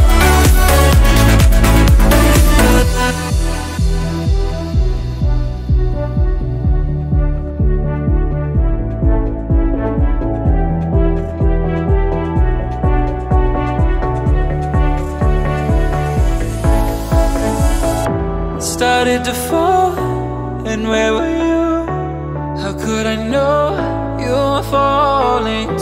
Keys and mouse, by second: 0.8-17.6 drag, 17.6 g.